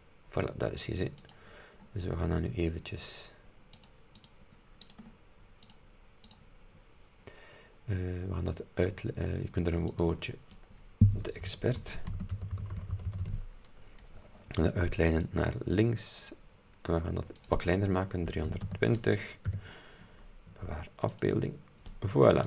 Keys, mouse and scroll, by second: 0.5 scroll up 2, 1.3 click, 1.9-2.5 scroll down 4, 3.8 click, 4.3 click, 4.9 right click, 5.8 click, 6.3 click, 10.0 click, 11.5-13.8 typing, 15.2 click, 16.3 click, 17.4 click, 18.4 KP_3, 18.6 KP_2, 18.7 KP_0, 19.6 Tab, 21.2 click.